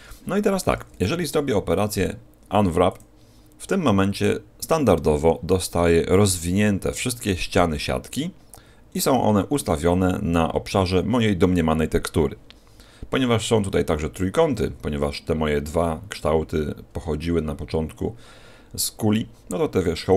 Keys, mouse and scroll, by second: 4.5-6.0 scroll down 1, 16.7-18.6 scroll up 3.